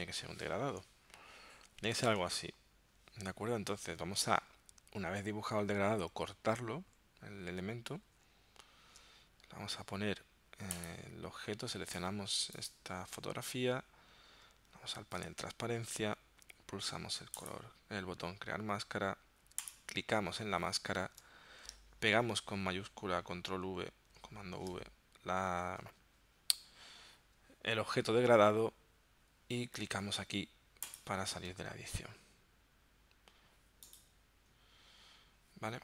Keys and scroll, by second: 8.1 super+x, 24.2 shift+super+v.